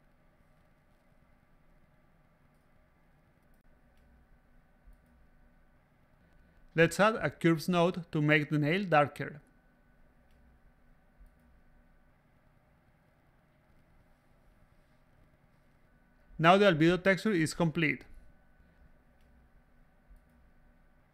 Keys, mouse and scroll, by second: 0.0 click, 0.5 middle drag, 0.8 right click, 1.7-2.2 middle drag, 2.8 a, 3.0 middle click, 3.6 click, 6.6 click, 9.0 click, 10.2 click, 11.8-13.8 drag, 15.0-16.1 drag, 16.5 a, 16.8 click, 17.5-18.6 drag.